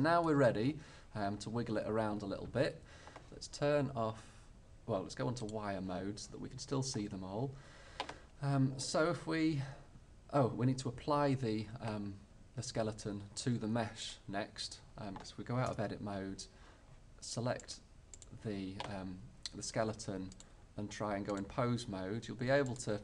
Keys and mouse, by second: 15.8 Tab, 16.0-17.7 middle drag, 20.2 middle click, 21.7 click, 22.8-23.0 drag.